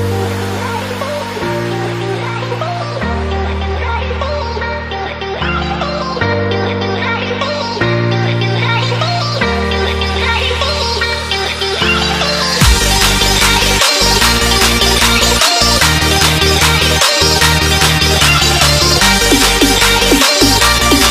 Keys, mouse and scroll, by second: 0.1 click, 4.1 scroll up 1, 4.9 scroll up 2, 6.1 click, 7.3 right click, 8.3 click, 11.9 ctrl+scroll up 1, 12.7 alt+scroll up 1, 13.6 alt+scroll up 1, 14.7 click.